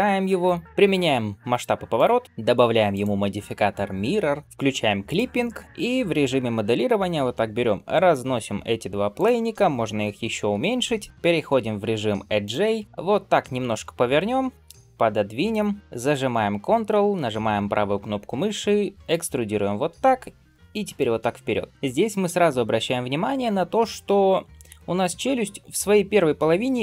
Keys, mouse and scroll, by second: 0.6 ctrl+a, 4.9 click, 5.5 Tab, 12.3 click, 15.8 shift+middle click, 15.8-16.6 scroll down 1, 18.9-21.3 ctrl+right drag, 21.7 shift+middle click, 21.7 scroll up 2.